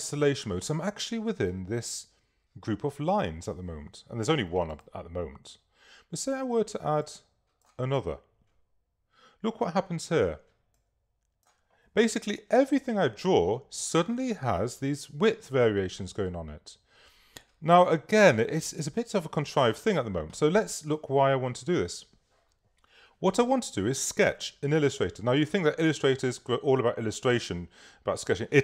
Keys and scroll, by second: 18.1 v.